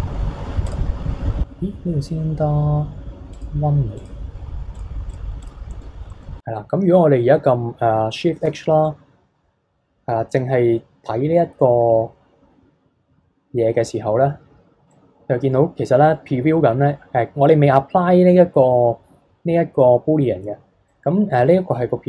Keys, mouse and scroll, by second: 0.7 click, 3.3 click, 4.0 click, 4.7 click, 5.1 click, 5.4 click, 5.7-8.4 middle drag, 8.4 shift+h, 8.8-11.9 middle drag, 14.9-17.4 middle drag, 17.4-19.4 scroll down 1, 19.4-20.1 scroll up 3, 20.1-20.9 scroll up 2, 20.9-22.0 middle drag.